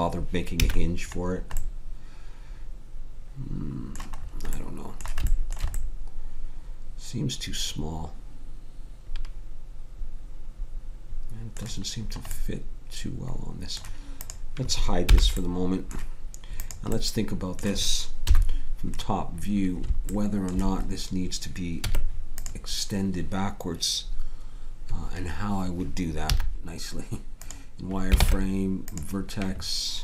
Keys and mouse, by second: 0.6 a, 3.5-4.6 middle drag, 8.0 middle click, 12.0-14.2 middle drag, 14.2-16.1 drag, 15.0 h, 18.2 KP_7, 21.8 Tab, 26.3 z, 28.9 ctrl+Tab.